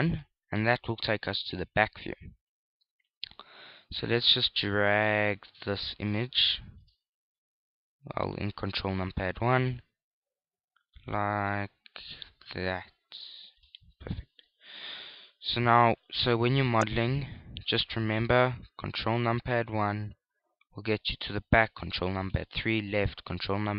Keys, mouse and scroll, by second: 4.5 click, 8.2 click, 15.7 KP_1, 16.2 KP_3, 16.9 ctrl+KP_3, 18.0 ctrl+KP_1, 18.8 KP_1, 20.2 ctrl+KP_1, 21.2-23.7 typing.